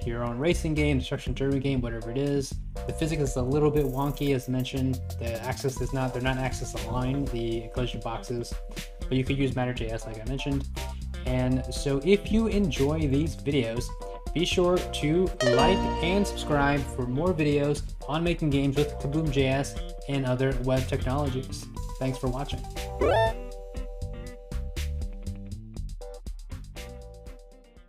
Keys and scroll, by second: 0.2 Right, 1.4 Right, 1.8 Left, 3.0 Right, 3.6 Left, 4.1 Right, 4.3 Left, 4.8 Right, 5.5 Left, 6.2 Left, 7.2 Right, 7.6 Left, 8.6 Right, 8.9 Left, 9.4 Right, 11.0 Left, 11.5 Right, 12.0 Left.